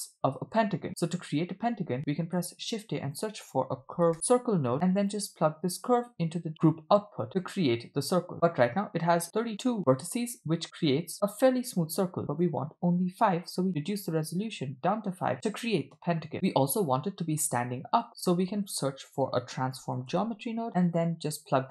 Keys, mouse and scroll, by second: 2.2 shift+a, 5.8-7.3 drag, 7.7-8.6 scroll up 4, 8.7-9.5 middle drag, 12.3-13.9 drag, 16.2 middle click, 18.5 shift+a.